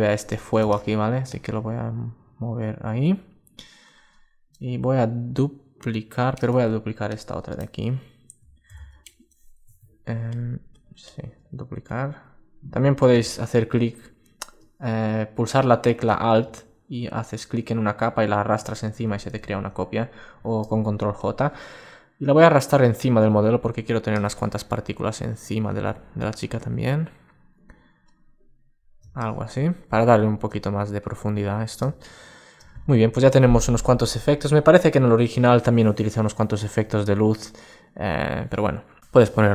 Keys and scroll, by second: 8.4 super+j, 9.3 Home, 19.1 super+z, 30.7 alt+space.